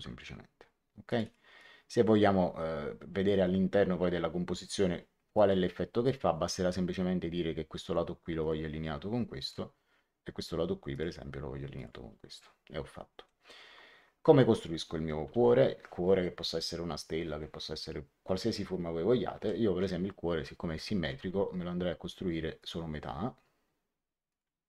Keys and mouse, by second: 1.0 click, 5.3 click, 8.3 click, 10.8 click, 13.2 middle click, 19.3 l, 21.0 x, 22.5 click, 24.2 click.